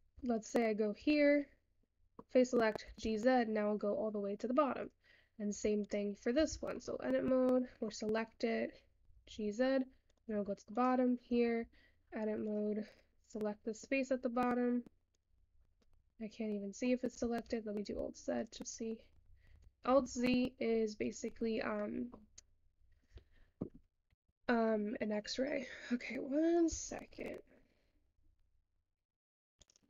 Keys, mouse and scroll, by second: 0.1 Tab, 2.0-3.3 middle drag, 3.3 g, 4.9 click, 5.6 Tab, 6.3 click, 6.5 Tab, 6.9-9.4 middle drag, 9.4 g, 10.7 Tab, 10.8 click, 11.8 Tab, 12.6 click, 13.1 scroll down 1, 13.2-14.2 middle drag, 14.2-15.2 scroll up 2, 15.2 click, 15.7 scroll down 1, 15.8-17.7 middle drag, 17.7 alt+z, 18.0-18.4 alt+scroll down 1, 18.4 click, 21.4-21.8 scroll down 2, 21.8 middle click, 22.6-23.5 scroll down 1, 23.5-25.6 scroll down 1.